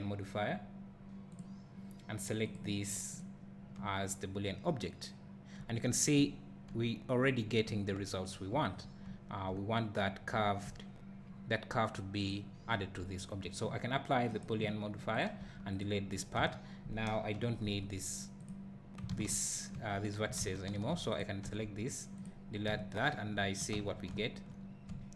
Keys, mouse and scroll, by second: 1.4-2.7 drag, 12.3 click, 14.4 click, 15.8 x, 16.1 click, 16.3 Tab, 18.4 x, 19.1 ctrl+z, 19.8 1, 20.4 alt+a, 20.9 3, 21.2 click, 22.3 x, 22.8 `, 23.8 Tab, 24.2 `.